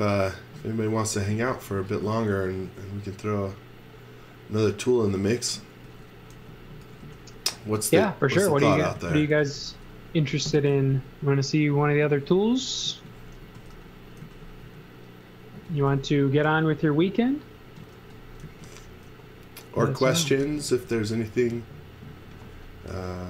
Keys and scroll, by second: 1.2 z, 1.8 x, 5.8 x, 7.0 v, 7.6 space, 8.6-10.3 typing, 12.0-21.4 typing.